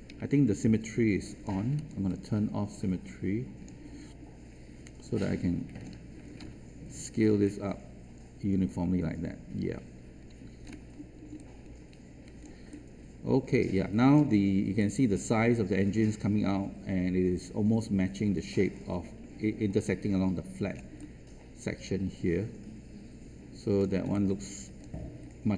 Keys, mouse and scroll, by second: 0.0 ctrl+z, 1.4 alt+click, 5.1 ctrl+shift+click, 7.4-10.6 ctrl+drag, 11.4 alt+click, 12.6-14.1 alt+drag, 14.4 scroll up 1, 14.9 alt+click, 20.7 scroll down 1, 20.9-23.8 alt+drag, 24.0 alt+space, 24.1 click.